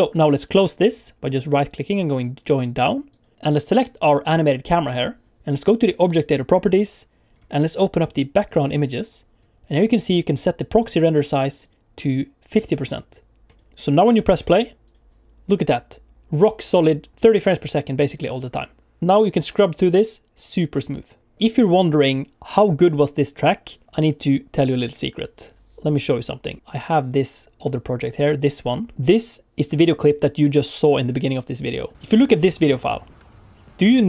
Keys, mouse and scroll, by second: 3.2 right click, 4.3 click, 6.8 click, 7.3-8.4 scroll down 3, 8.4 click, 8.8-9.9 scroll down 3, 11.6 click, 14.1 click, 14.8 click, 26.6 click.